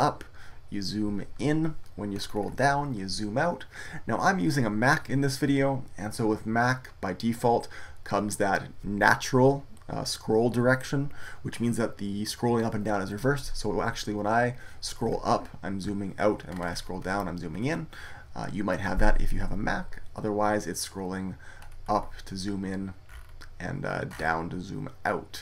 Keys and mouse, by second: 14.8-16.5 middle drag, 17.4-23.0 middle drag, 23.2-25.4 middle drag.